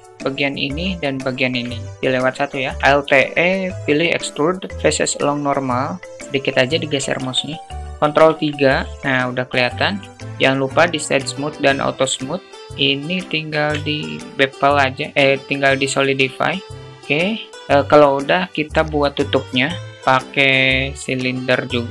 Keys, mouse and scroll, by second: 0.6 shift+click, 0.8 shift+click, 2.5 alt+e, 6.6 Tab, 7.4-7.8 alt+middle drag, 7.9 ctrl+3, 8.9 middle click, 9.8 right click, 10.8 q, 12.8 alt+shift+middle drag, 13.1 alt+shift+middle click, 14.6 drag, 15.4-16.6 drag, 17.2-17.5 alt+middle drag, 19.8 shift+a.